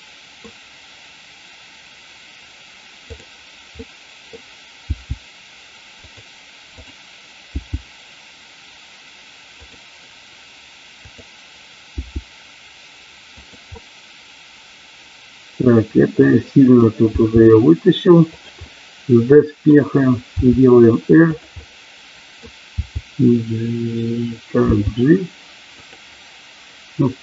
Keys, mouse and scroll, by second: 3.0 click, 3.8 middle click, 4.8 g, 7.6 g, 9.6 click, 10.9 click, 11.9 g, 13.3 click, 13.7-16.7 middle drag, 17.1 g, 18.7-19.8 middle drag, 20.3 r, 21.3 click, 22.7 r, 24.7 g, 25.7 click.